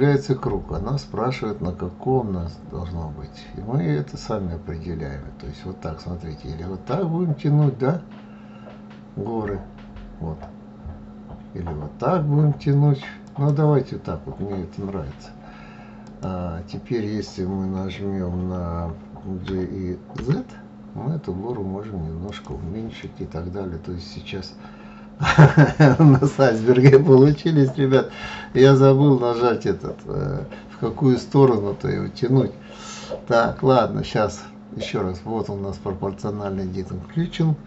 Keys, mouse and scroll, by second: 15.4 click, 18.9 g, 22.4-25.5 middle drag, 27.1 ctrl+z, 27.6 ctrl+z, 27.9 ctrl+z.